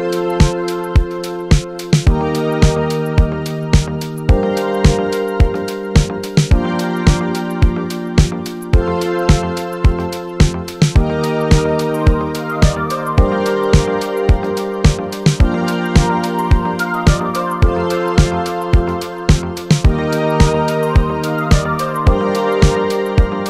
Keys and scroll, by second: 0.0-0.9 typing, 19.6-20.8 typing.